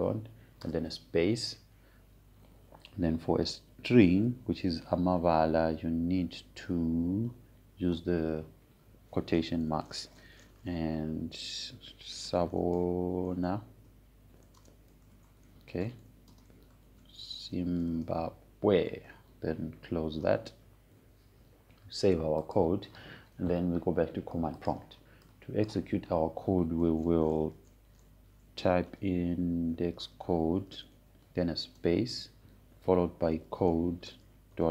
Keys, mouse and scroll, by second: 0.0-0.9 typing, 2.5 space, 6.7 shift+space, 9.5 shift+', 12.7-20.6 typing, 21.8 shift+', 24.1-29.9 drag, 30.6-33.4 typing, 34.6-34.7 typing.